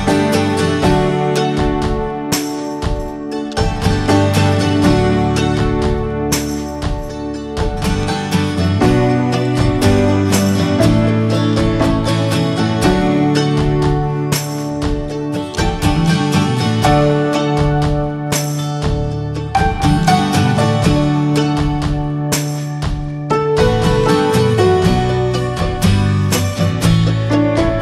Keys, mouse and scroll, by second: 0.9-2.1 middle drag, 2.1 2, 2.4 click, 2.8 alt+shift+click, 3.1 middle click, 3.6 alt+shift+click, 3.9 middle click, 4.3 ctrl+b, 6.1 Tab, 6.3 scroll down 3, 6.5 middle click, 6.6 scroll up 1, 6.9-7.7 shift+middle drag, 7.7 ctrl+s, 8.0 scroll up 1, 8.2-8.8 shift+middle drag, 8.8 scroll up 1, 9.0-9.8 shift+middle drag, 9.8-10.5 scroll up 2, 10.0 shift+middle click, 10.5-10.9 middle drag, 10.9 scroll up 1, 11.1 Tab, 11.5 middle click, 12.2 3, 12.3 click, 12.6 middle click, 13.0 s, 14.4 alt+middle click, 14.8 shift+middle click, 15.2 e, 16.7 scroll down 2, 16.9 middle click, 17.3 ctrl+b, 19.3 click, 20.2 shift+middle click, 21.0 ctrl+b, 23.6 click, 24.9-27.4 drag, 27.4-27.8 scroll up 1.